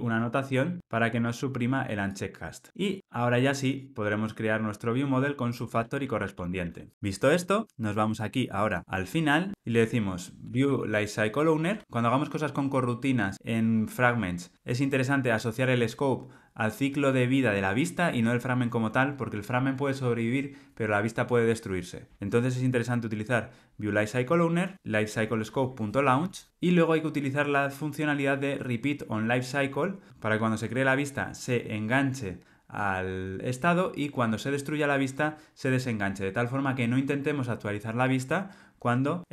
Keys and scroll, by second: 0.1 Tab, 1.0 Tab, 9.5 Escape, 11.8 Return.